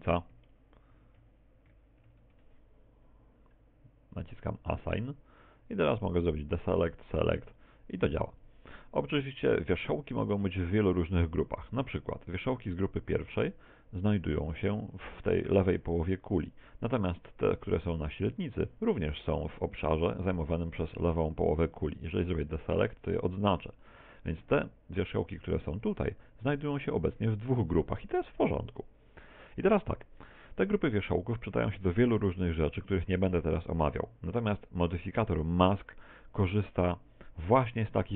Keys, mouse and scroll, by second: 4.2 click, 6.4 click, 6.9 click, 7.5 click, 7.9 click, 8.4 click, 9.0 click, 12.3 click, 13.3 click, 17.9 click, 22.6 click, 25.1 click, 25.9 a, 26.2 b, 30.0 a, 30.2 z, 30.6 middle click, 32.1 middle click, 34.6 middle click.